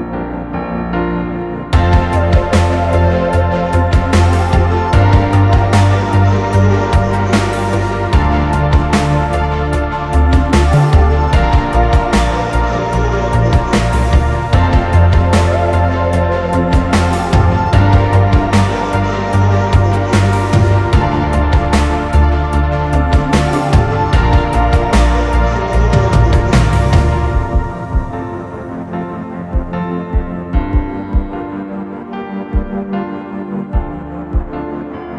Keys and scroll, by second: 15.0 ctrl+=, 15.6 ctrl+=, 19.2 p, 25.0 ctrl+=, 33.2-34.0 Right, 34.9 F9.